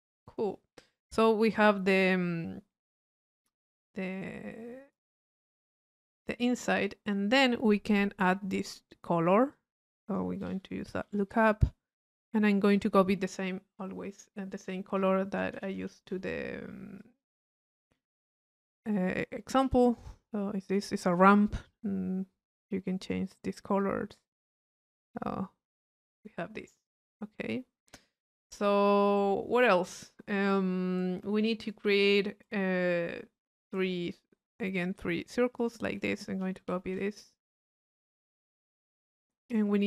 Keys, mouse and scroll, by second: 0.3-1.9 middle drag, 8.3 click, 9.5 click, 11.9 click, 12.8 click, 13.3 click, 19.1 click, 20.2-21.4 drag, 22.6-24.5 drag, 24.8 click, 24.9-29.6 middle drag, 35.6 click, 36.5 c, 37.4-39.8 drag.